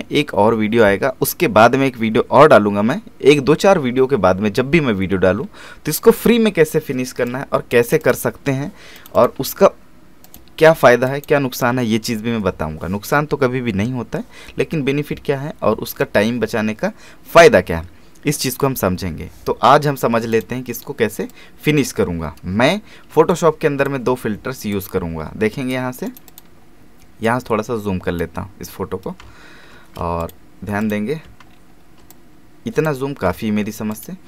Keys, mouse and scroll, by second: 5.4-6.1 scroll down 1, 7.3 click, 20.3-22.6 drag, 22.6 alt+scroll up 1, 24.7-26.1 drag, 26.1 right click, 26.3-28.6 drag, 28.6-29.2 scroll up 1, 29.2 alt+space, 30.2 click, 31.2 space, 31.5 alt+scroll up 1, 32.1-33.9 drag.